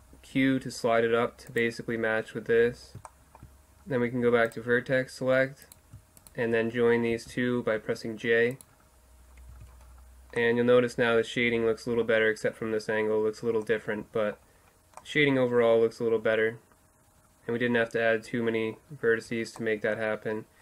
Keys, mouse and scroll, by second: 3.1 middle click, 4.5-7.1 middle drag, 7.1-9.8 right drag, 7.1 j, 9.5 Tab, 9.8-10.2 middle drag, 13.7-16.3 middle drag, 16.7 middle click, 18.9 middle click, 19.2 Tab.